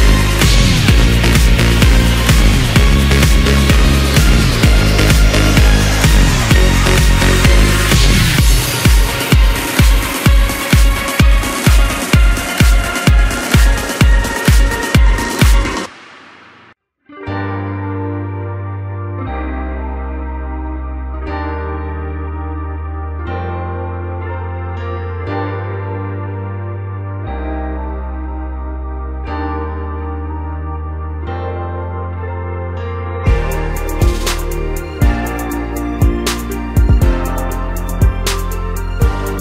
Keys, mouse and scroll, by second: 0.8 scroll down 2, 1.0-2.4 middle drag, 2.4 KP_7, 3.4 KP_1, 4.2-4.5 scroll up 3, 4.5-5.0 middle drag, 5.3 Tab, 6.3 ctrl+KP_7, 7.0 scroll up 3, 7.7 click, 8.0 click, 8.2-9.1 scroll down 9, 9.1 KP_1, 10.7 e, 13.0 s, 16.3-16.7 scroll up 1, 16.7 scroll down 1, 16.9 middle click, 17.5-17.8 scroll up 2, 17.8 middle click, 18.7-20.3 scroll up 2, 20.3 f, 21.3 3, 22.6 Tab, 23.5 ctrl+a, 24.8 Tab, 25.9 ctrl+b, 29.3 click, 29.9-31.4 right drag, 31.4 scroll down 4, 31.6 middle click, 32.3 KP_1, 33.0-33.9 scroll up 2, 33.9 ctrl+r, 37.7 scroll down 1, 38.0 Tab, 38.4 scroll up 3, 38.6 scroll down 1, 38.9-39.4 middle drag.